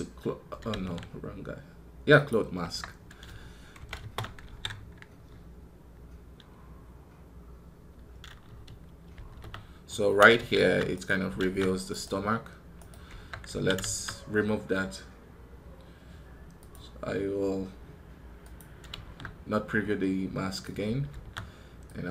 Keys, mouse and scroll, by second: 10.8 right click, 11.8 right click, 12.6 right click.